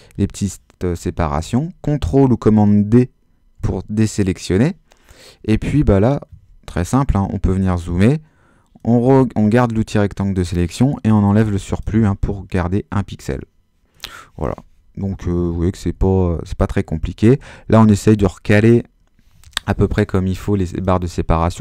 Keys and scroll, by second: 3.6 super+d, 6.7 super++, 11.1 BackSpace, 15.3 Right, 17.4 Up, 17.7 Right, 18.0 Left, 18.4 Down.